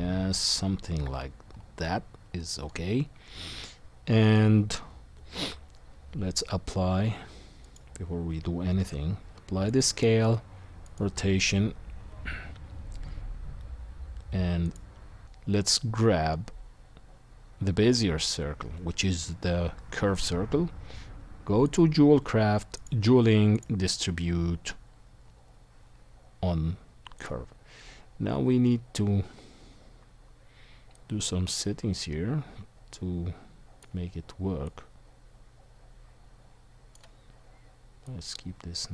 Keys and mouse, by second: 1.5-7.8 middle drag, 5.3 shift+a, 7.8-10.2 right drag, 8.8 ctrl+a, 10.2 ctrl+a, 14.6 shift+click, 21.6 click, 22.8-32.5 drag, 35.1 click, 36.5-38.9 drag, 36.5-38.9 middle drag, 36.5-38.9 right drag.